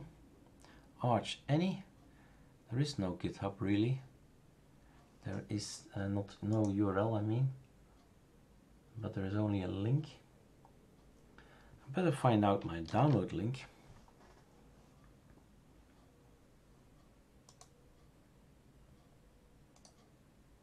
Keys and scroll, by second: 12.9 super+f.